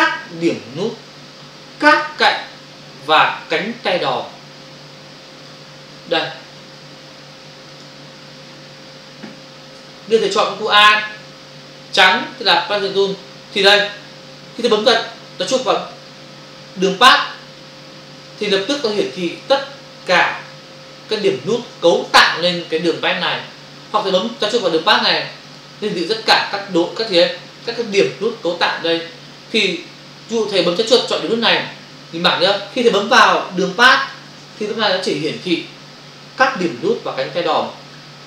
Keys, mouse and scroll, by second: 7.8 click, 11.2 click, 13.6 click, 17.0 click, 19.1 ctrl+click, 19.7 click, 20.6 ctrl+click, 22.1 space, 25.5 click, 32.4 space, 33.2 ctrl+click, 34.5 space, 34.6 click, 34.7 space.